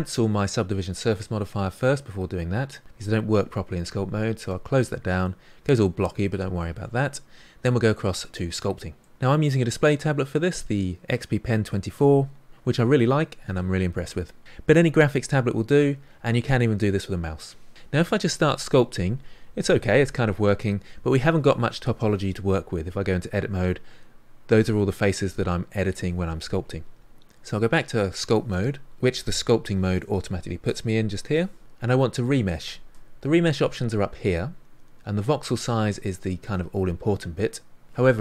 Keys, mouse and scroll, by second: 4.3 click, 5.2-8.2 middle drag, 8.2 click, 9.0-17.7 shift+middle drag, 17.7 ctrl+z, 17.9-23.0 drag, 23.0 Tab, 27.4 Tab.